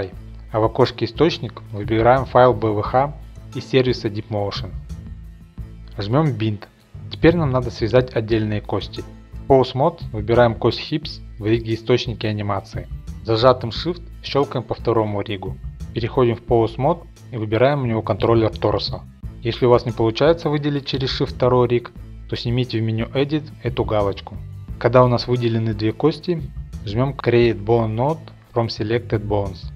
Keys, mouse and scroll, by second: 4.6 click, 6.0 click, 8.3 click, 10.0 click, 10.3 click, 11.7 click, 14.0-15.3 scroll, 15.3 shift+click, 16.6 ctrl+Tab, 16.6-17.4 scroll up 3, 18.5 scroll, 20.8 click, 22.0 click, 23.6 click, 29.0 click.